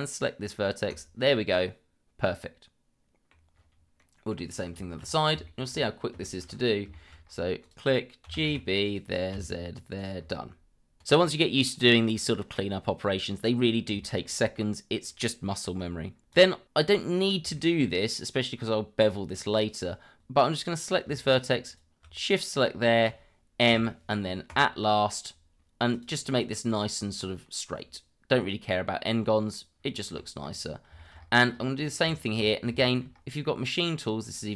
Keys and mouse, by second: 0.9 click, 1.5-3.3 middle drag, 4.0-4.3 middle drag, 4.8 shift+middle click, 5.4 shift+middle click, 6.2 shift+middle click, 6.9 shift+middle click, 7.6 click, 8.2 g, 8.4 b, 8.8 click, 9.3 z, 10.0 click, 11.9-12.7 middle drag, 14.0 shift+middle drag, 16.3 click, 17.5-17.8 shift+middle drag, 21.6 shift+click, 23.7 m, 25.9 click, 26.5-26.8 middle drag, 28.3-29.5 middle drag, 30.2 shift+middle click, 31.0 shift+middle click, 32.1 shift+middle click, 32.8 shift+middle click, 34.2 click.